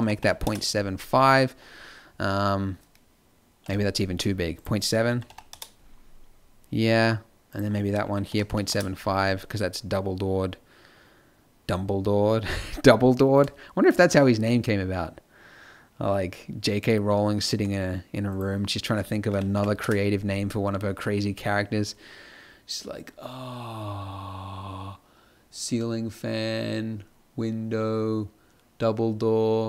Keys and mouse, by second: 6.3-7.4 middle drag, 20.2-29.6 middle drag.